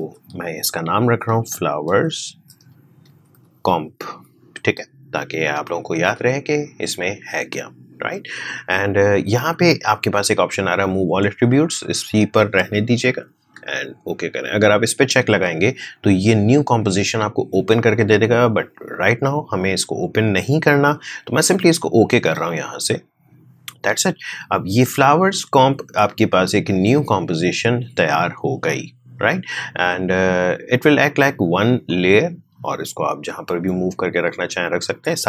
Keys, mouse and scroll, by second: 0.0-4.3 typing, 21.7-31.8 drag, 31.8-35.2 drag.